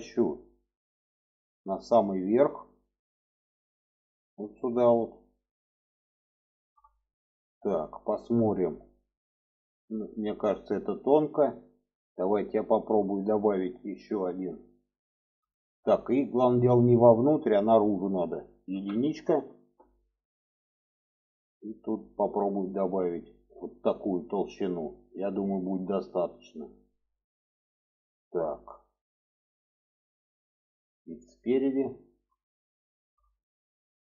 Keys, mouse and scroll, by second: 1.5 click, 3.0-5.3 drag, 6.2 shift+middle click, 6.9 middle click, 7.9 shift+middle click, 8.6 middle click, 9.5 shift+middle click, 13.2 drag, 16.0 shift+middle click, 17.3-19.8 drag, 22.5 click, 23.4-30.1 middle drag, 30.6 alt+middle click, 31.7 shift+middle click, 32.6 shift+middle click.